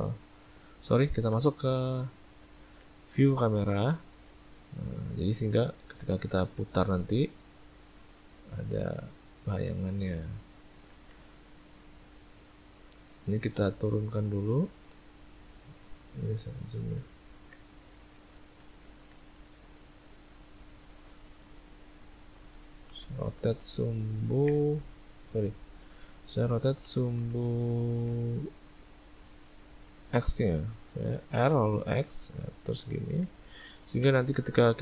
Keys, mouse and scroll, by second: 1.3 `, 2.1 `, 4.5 ctrl+middle click, 5.0 ctrl+middle click, 5.6 ctrl+middle click, 6.3 r, 10.9 ctrl+z, 11.7 ctrl+middle click, 11.9 ctrl+middle click, 12.6 ctrl+middle click, 13.1 middle click, 13.9 click, 14.6 click, 16.3 ctrl+middle click, 17.0 ctrl+middle click, 17.3 ctrl+middle click, 17.7 shift+middle click, 18.5 ctrl+middle click, 18.7 ctrl+middle click, 18.9 ctrl+middle click, 22.9 r, 25.7 click, 26.8 r, 34.0 r.